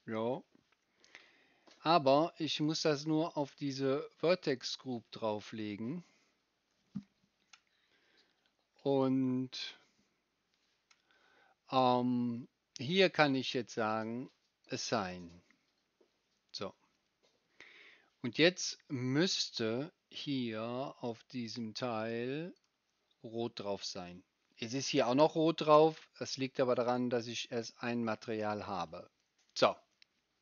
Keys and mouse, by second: 0.1-4.5 right drag, 4.5-9.0 middle drag, 9.0-14.7 right drag, 14.7-22.6 middle drag, 22.6-30.4 right drag.